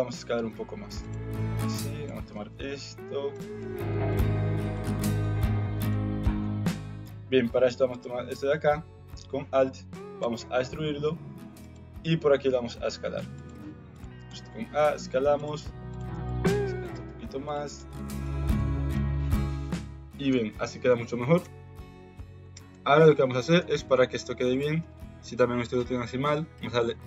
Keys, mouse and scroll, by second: 1.7 click, 2.3 g, 3.5 r, 4.2 s, 5.3 click, 6.3 KP_Decimal, 7.9 alt+click, 10.2 e, 12.0 s, 14.2 s, 15.9 alt+click, 16.2 s, 17.4 alt+click, 17.8 s, 18.5 alt+z, 18.9 Tab, 19.5 middle click, 20.4 shift+middle click, 20.8 middle click, 21.4 KP_1, 21.7 KP_3, 22.7 middle click, 23.5 KP_1, 24.5 shift+middle click.